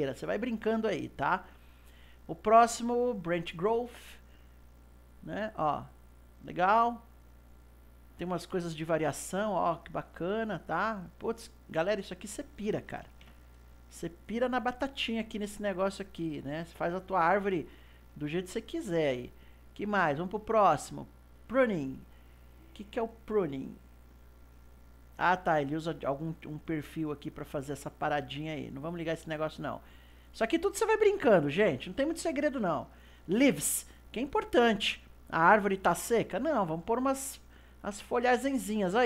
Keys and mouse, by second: 1.6-4.6 drag, 4.7-10.8 drag, 12.2-15.1 drag, 15.1-19.8 middle drag, 19.8-22.8 drag, 24.0 click, 25.6-28.9 middle drag, 28.9 click, 30.9-33.9 drag, 38.1 click.